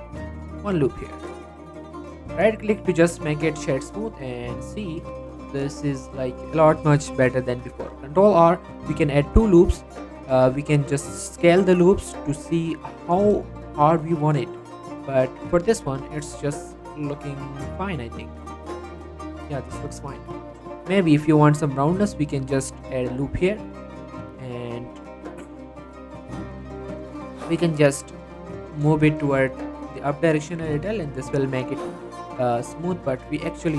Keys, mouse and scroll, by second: 1.6 Tab, 1.8-2.4 scroll down 1, 2.4 right click, 2.8 click, 3.5 middle click, 4.5 click, 5.0 Tab, 5.5 shift+middle click, 5.6 shift+scroll up 1, 5.8 middle click, 7.4 middle click, 7.7 ctrl+r, 8.6-9.1 scroll up 1, 9.1 click, 9.3 right click, 9.6 middle click, 10.2 s, 10.7 y, 12.2 click, 12.4 Tab, 12.6 scroll down 1, 13.0 click, 13.3 middle click, 13.5 shift+middle click, 13.7-14.2 shift+scroll up 2, 13.8 middle click, 14.2 scroll down 1, 14.3 middle click, 14.6 shift+middle click, 14.8 scroll up 1, 15.0 middle click, 15.8 scroll down 1, 15.9-18.2 shift+middle drag, 18.2 scroll up 1, 18.4 middle click, 18.8 shift+middle click, 19.1 scroll down 1, 19.4 middle click, 19.6 scroll up 1, 19.8-20.2 scroll down 1, 20.4 middle click, 20.6 scroll up 1, 20.8 Tab, 21.1 middle click, 22.8 ctrl+r, 23.2 click, 23.3 right click, 23.5 scroll down 1, 23.8 middle click, 24.0 scroll up 1, 24.1-25.8 middle drag, 25.8-26.1 scroll up 1, 26.3 middle click, 27.4 click, 27.7 middle click, 28.7 shift+click, 28.9 middle click, 29.1 g, 29.4 z, 30.3 right click, 31.3 click, 31.7 g, 32.0 z, 32.2 scroll up 1, 33.3-33.7 scroll down 1.